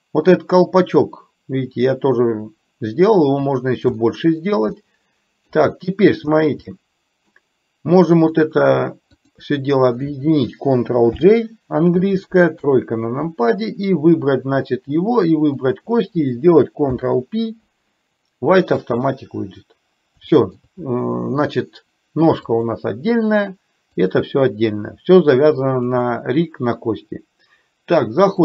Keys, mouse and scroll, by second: 4.1 shift+middle click, 4.9 middle click, 5.9 shift+middle click, 6.9 middle click, 8.4 click, 9.4 shift+click, 11.2 ctrl+j, 12.7 KP_3, 15.6 click, 20.4 shift+middle click, 22.6 click, 24.1 click, 26.0 click.